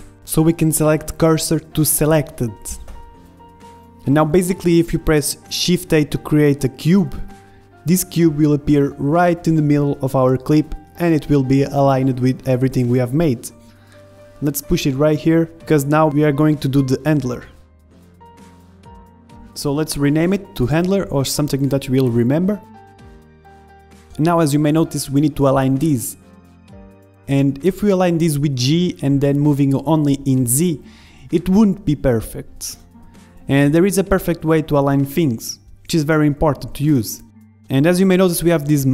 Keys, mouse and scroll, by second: 6.0 click, 6.0 KP_1, 6.4 shift+a, 6.5 middle click, 11.1 middle click, 11.6 s, 12.6 KP_1, 13.5 s, 15.9-19.4 drag, 19.6-20.9 middle drag, 20.9-22.1 drag, 23.6-26.4 middle drag, 27.0-28.5 drag, 28.4 middle click, 29.0 click, 29.9-31.8 middle drag, 31.8 click, 32.6 click, 33.6 ctrl+z, 34.1 ctrl+z, 34.5 ctrl+z, 35.2 middle click, 36.1 KP_1, 36.3 click, 36.8 middle click, 38.0 click.